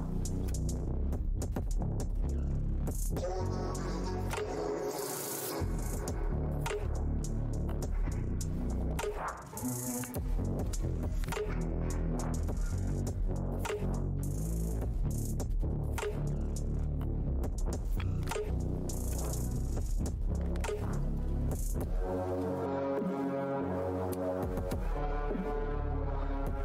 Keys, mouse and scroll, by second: 0.4 Tab, 1.1 Tab, 1.7 click, 3.8 click, 5.4 right click, 6.3 click, 7.1 alt+Tab, 7.5 ctrl+v, 8.1 click, 8.8 alt+Tab, 10.0 click, 10.9 click, 12.2 scroll down 1, 15.2 scroll down 1, 17.8 Tab, 17.8 scroll down 1, 19.0 scroll down 1, 19.6-20.3 scroll down 1, 20.9 scroll down 1, 22.0 scroll down 1, 24.0 scroll down 1, 25.3 scroll down 1.